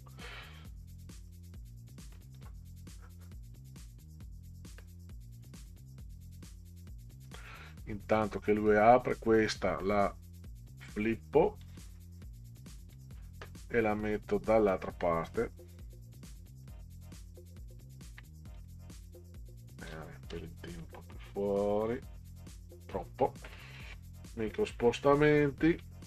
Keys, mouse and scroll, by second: 8.2 click, 11.6 click, 12.9 click, 14.7-16.7 drag, 17.8 ctrl+scroll up 2, 18.5 click, 19.8 click, 20.8 KP_0, 21.8 Right, 25.7 shift+Left.